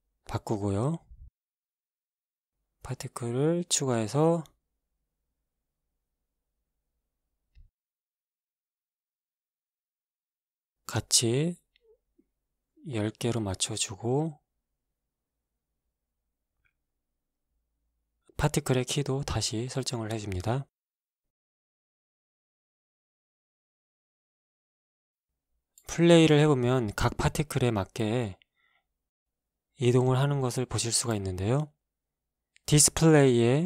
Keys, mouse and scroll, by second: 0.9 g, 1.7 y, 3.2 click, 4.1 click, 5.7 click, 8.2 click, 10.5 click, 12.1 KP_1, 12.3 KP_0, 12.8 Return, 13.4 KP_1, 15.2-16.2 scroll up 1, 16.4 shift+Left, 17.5 alt+shift+a, 18.5 right click, 19.3 Escape, 19.7-20.5 scroll up 1, 20.5 scroll down 1, 22.6 click, 23.5 click, 25.3 click, 26.6 alt+a, 31.7-33.6 scroll down 4.